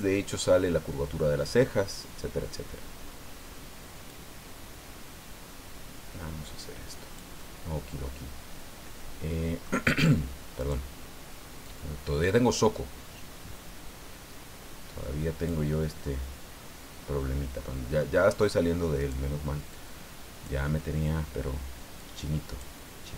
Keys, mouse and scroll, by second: 4.1 click, 4.7-5.2 scroll down 2, 6.1 scroll down 2, 7.4-9.8 drag, 10.6 right click, 11.6 click, 12.1-12.8 scroll up 4, 15.7-18.2 middle drag, 19.0 right click, 19.7 click, 22.0 click.